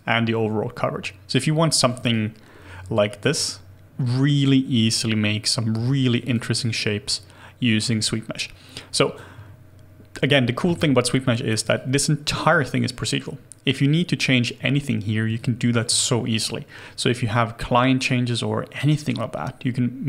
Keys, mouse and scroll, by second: 2.1 alt+click, 5.8 alt+click, 11.1-11.6 scroll down 1, 11.7 alt+click.